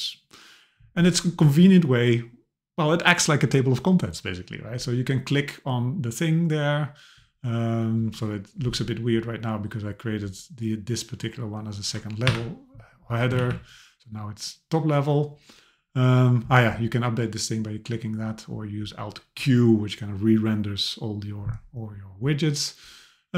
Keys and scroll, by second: 12.3 Delete, 13.4 alt+q.